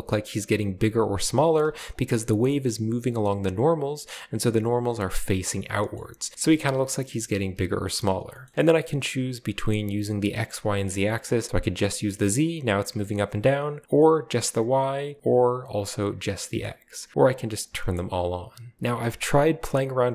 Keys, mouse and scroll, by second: 0.0-0.9 middle drag, 1.4-1.9 scroll up 1, 1.4 space, 1.9-3.6 drag, 5.9-6.6 scroll down 1, 6.4 space, 7.9-8.7 scroll up 2, 11.1 drag, 11.8-12.6 scroll down 2, 13.5 click, 15.1-16.5 drag, 16.9 middle drag, 17.2-17.9 drag, 17.9-18.8 middle drag.